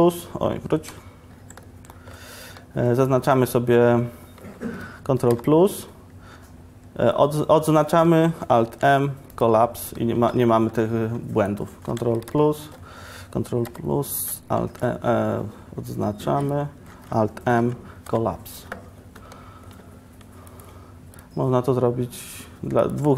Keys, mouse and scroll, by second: 0.0 ctrl+KP_3, 0.0 ctrl+KP_6, 1.0 KP_0, 1.0 KP_Decimal, 17.2 alt+m, 17.6 alt+m.